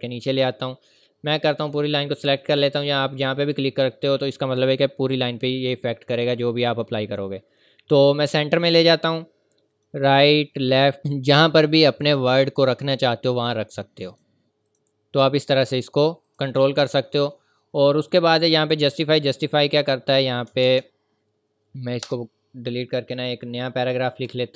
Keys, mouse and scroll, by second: 1.6 click, 8.2 click, 12.8 click, 19.6-20.0 scroll up 1, 20.0-20.5 scroll down 1, 21.3 scroll up 1, 22.0 BackSpace, 24.2 =.